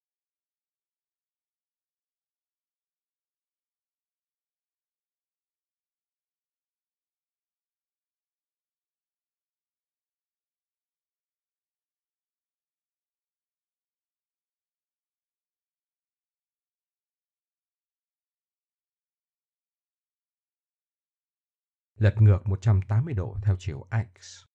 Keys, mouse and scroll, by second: 0.4 a, 1.2 click, 3.1 Tab, 4.1 KP_3, 5.2 ctrl+KP_3, 6.2 click, 7.6-8.3 drag, 10.2 Tab, 10.7 Tab, 10.9 Tab, 11.4 Tab, 11.9 click, 14.1 click, 16.0 Tab, 16.4 Tab, 16.7 KP_1, 18.1 click, 23.2 r.